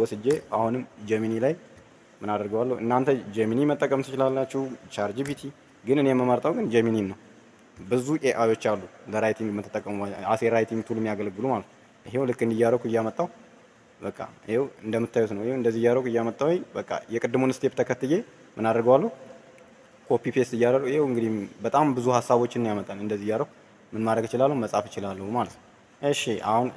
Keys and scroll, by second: 0.2 ctrl+c, 5.1 ctrl+v.